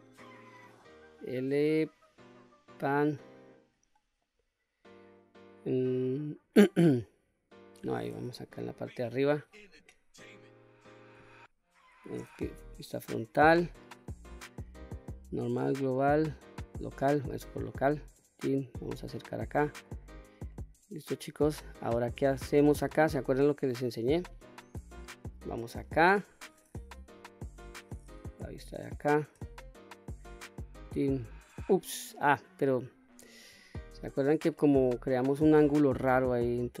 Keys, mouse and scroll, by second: 8.0 KP_7, 12.2 KP_1, 14.4-17.1 drag, 17.9-19.5 drag, 19.8-20.2 scroll up 1, 20.2-22.5 middle drag, 22.5-22.8 scroll up 1, 23.3 click, 23.9-25.5 middle drag, 26.8 KP_7, 28.3-28.9 shift+middle drag, 30.5 ctrl+right click, 31.9-32.7 right drag, 33.5 ctrl+z, 34.3-35.0 middle drag, 35.4-36.1 middle drag, 36.3-36.8 scroll up 1.